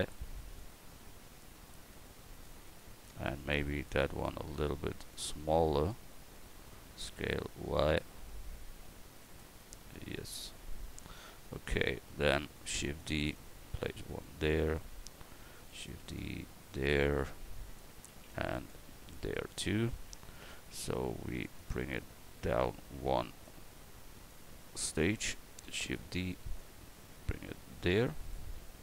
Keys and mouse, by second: 0.6-2.4 drag, 6.9 s, 12.7 shift+d, 13.4-15.6 drag, 15.6 shift+d, 16.2-18.1 drag, 18.1 shift+d, 18.7-21.3 drag, 21.4-28.8 drag, 25.7 shift+d.